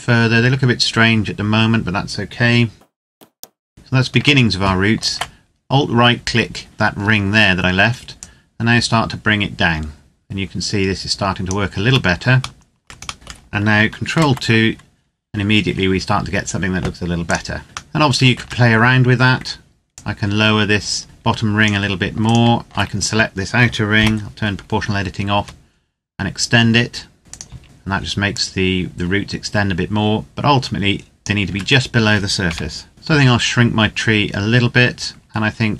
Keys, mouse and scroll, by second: 3.1 click, 3.3 middle click, 4.7 alt+right click, 6.7 scroll down 1, 7.9 click, 11.6 Tab, 12.4 shift+middle click, 13.1 middle click, 13.9 ctrl+2, 17.1 click, 17.7 middle click, 18.1 Tab, 19.7 click, 22.0 alt+right click, 23.7 o, 25.1 s, 27.2 z, 27.6 z, 28.0 click, 31.3 Tab, 32.3 KP_0, 32.9 s, 33.7 click, 35.4 right click.